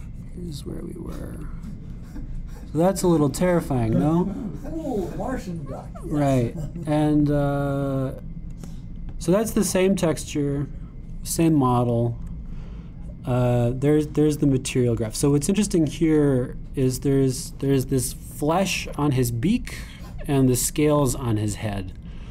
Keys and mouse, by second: 0.0-7.9 drag, 14.6 ,, 18.1-22.3 drag.